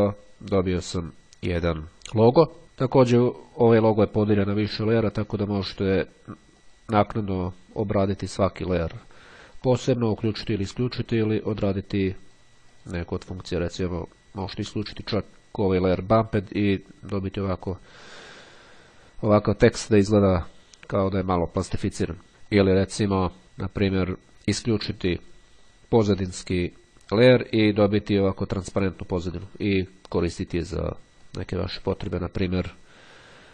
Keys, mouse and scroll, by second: 5.2 click, 6.7 click, 8.1 click, 9.6 click, 10.3 click, 11.6 click, 12.9 click, 22.3 ctrl+scroll down 1, 24.9 click, 27.1 click, 28.4-31.6 middle drag.